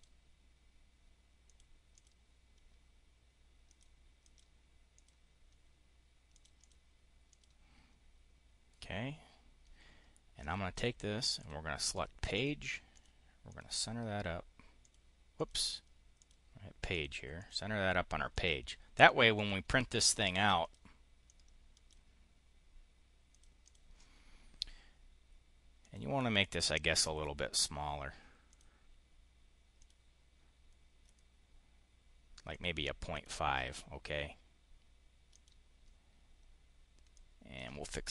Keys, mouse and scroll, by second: 1.3 click, 1.8 click, 3.5 click, 4.1 click, 4.8 click, 6.2 click, 7.2 click, 10.2 click, 11.2 click, 12.2 click, 12.8 click, 13.3 click, 14.7 click, 15.3 click, 16.0 click, 16.8 click, 17.3 click, 18.2 click, 18.9 click, 19.1 click, 20.4 click, 21.0 click, 23.2 click, 23.5 click, 25.7 click, 28.4 click, 29.6 click, 32.4 click, 33.0 click, 35.2 click, 37.0 click, 37.9-38.1 typing.